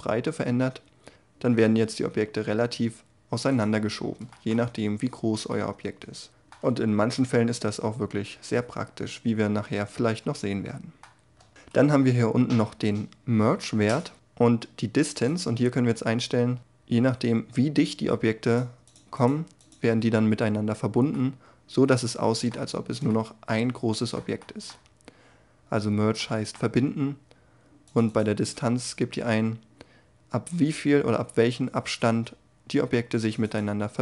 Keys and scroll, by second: 6.5 g, 10.9 Tab.